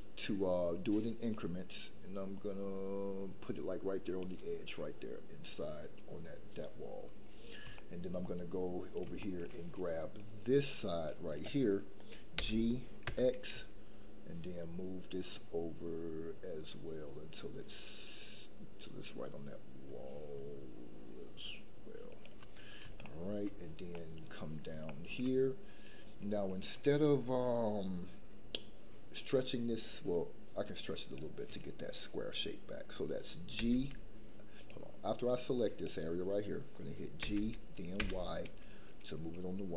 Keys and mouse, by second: 4.0 shift+click, 7.7 shift+middle click, 9.2 shift+middle click, 10.3-11.1 drag, 12.3 g, 13.0 x, 23.0 shift+middle click, 23.9 middle click, 24.8 shift+middle click, 30.6 click, 33.5 g, 35.4 click, 37.2 g, 37.9 y.